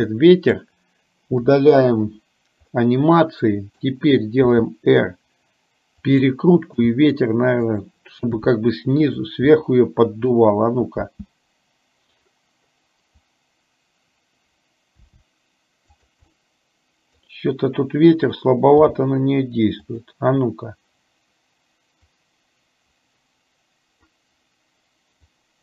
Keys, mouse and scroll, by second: 1.5 Delete, 2.8-3.9 middle drag, 4.7 r, 6.8 g, 8.5 r, 9.7 middle click, 11.2 space, 15.2 r, 16.4 middle click, 19.0 g, 22.3-24.2 drag, 25.3-25.6 drag.